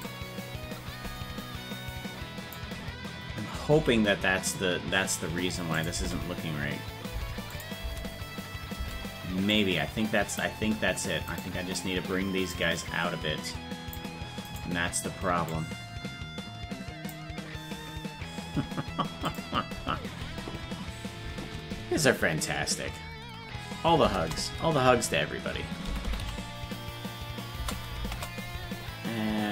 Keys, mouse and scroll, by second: 0.1-2.6 drag, 3.8 alt+r, 5.8 click, 6.0 space, 7.6 click, 7.9 space, 9.6 click, 11.5 right click, 12.6-14.0 drag, 14.7 right click, 15.5-17.1 drag.